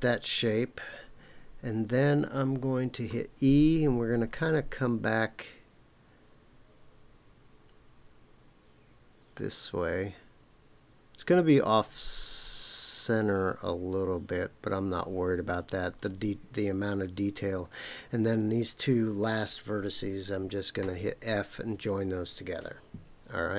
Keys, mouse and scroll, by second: 3.1 e, 15.9 click, 17.1 click, 20.8 f.